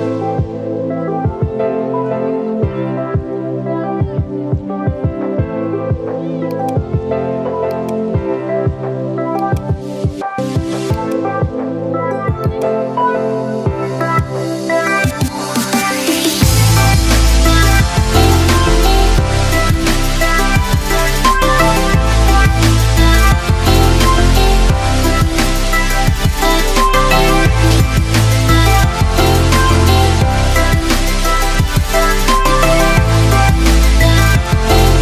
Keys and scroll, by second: 1.1 KP_Subtract, 1.6 KP_4, 4.0 KP_5, 4.7 Return.